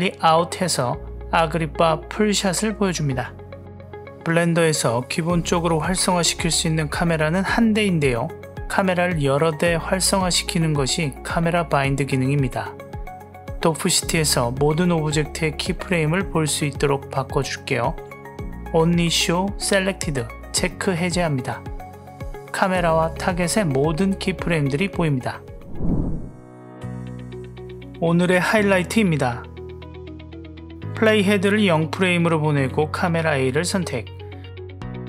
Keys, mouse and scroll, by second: 6.5-8.0 drag, 11.8 space, 21.6-23.6 drag, 24.1 drag, 24.7 click, 29.7-31.4 drag, 33.8 click.